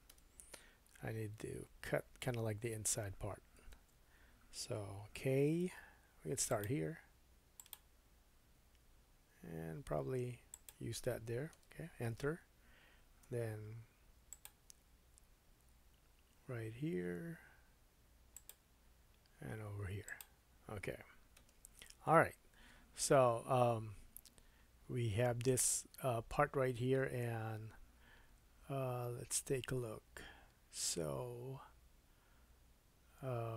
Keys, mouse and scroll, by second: 3.8 super+z, 5.6 k, 13.3 k.